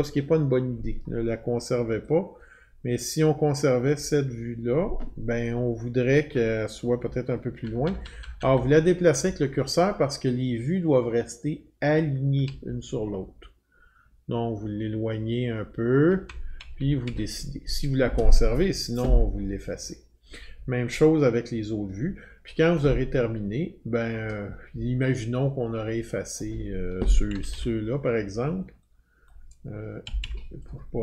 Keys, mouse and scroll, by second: 3.8 click, 7.0 Left, 7.6 Left, 7.8 Left, 8.0 Left, 8.0 click, 8.2 Left, 8.4 Left, 8.5 Left, 8.7 Left, 9.2-12.4 Right, 12.6 Left, 13.1-16.1 Left, 16.6 Right, 16.8 Right, 17.0 Right, 26.3 click, 27.3 Delete, 27.5 Delete, 29.3 click, 30.0 Delete, 30.2 Delete.